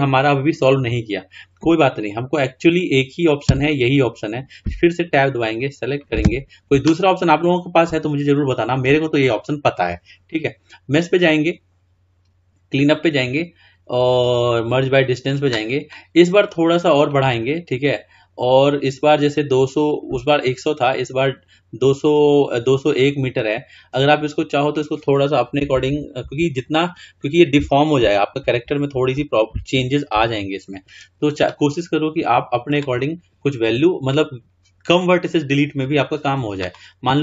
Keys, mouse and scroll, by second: 2.0-2.3 drag, 2.8 click, 3.6 Tab, 5.2-6.3 drag, 6.3 a, 11.3-14.1 drag, 17.1-19.9 drag, 24.1-25.9 drag, 25.9 Left, 26.0 Left, 26.5 Right, 28.8 Delete.